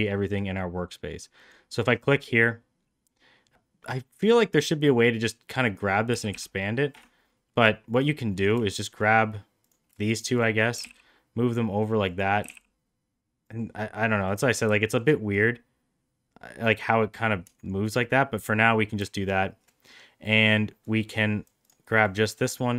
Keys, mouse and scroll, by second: 0.3 middle click, 1.5 click, 5.5 click, 6.1 s, 7.9 click, 9.7 click, 10.2 shift+click, 10.8 g, 12.4 g, 14.3 click, 14.9 shift+click, 15.3-17.2 drag, 20.9 click, 21.6 click, 22.1-22.7 drag.